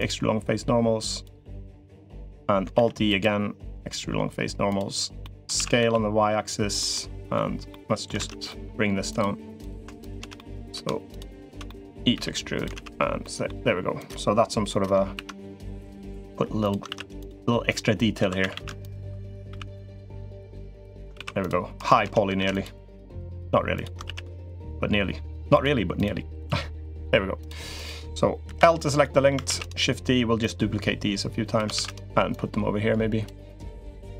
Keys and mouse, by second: 1.6 middle click, 2.5 alt+e, 5.0 click, 5.1 middle click, 5.3 s, 6.7 middle click, 7.5 click, 7.9 alt+z, 8.2 middle click, 8.9 click, 9.4 click, 10.1 shift+click, 10.9 shift+click, 11.2 shift+click, 11.4 middle click, 11.9 e, 12.5 alt+z, 13.0 click, 13.8 click, 14.9 ctrl+r, 16.6 ctrl+r, 17.9 2, 18.2 a, 18.3 a, 18.6 alt+shift+click, 19.2 s, 20.9 ctrl+r, 21.8 ctrl+z, 22.1 ctrl+r, 23.8 ctrl+r, 26.2 s, 27.5 click, 28.2 l, 28.8 middle click, 29.2 shift+d, 30.2-31.3 drag, 31.5 shift+d, 32.1 click, 33.7 click.